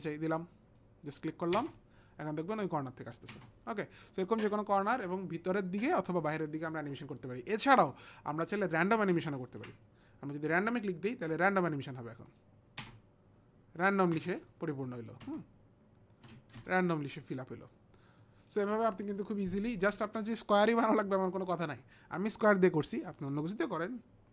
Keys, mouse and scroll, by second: 0.8 click, 1.6 space, 3.3 space, 7.8 click, 9.5 ctrl+z, 10.6 click, 12.3 click, 12.9 space, 14.2 space, 14.8 click, 15.3 space, 16.6 space, 18.4 click, 18.4 space.